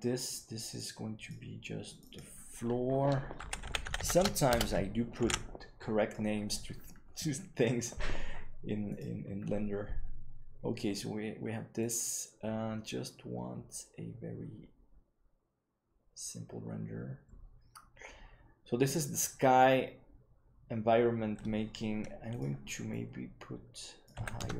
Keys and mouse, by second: 0.9 click, 1.8 click, 2.1-6.4 drag, 3.9 shift+o, 5.6 ctrl+s.